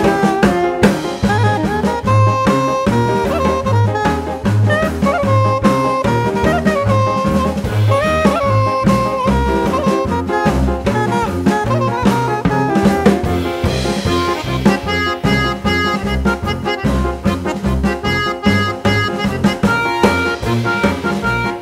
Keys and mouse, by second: 7.4 click, 9.2 click, 12.4 click, 14.6 click.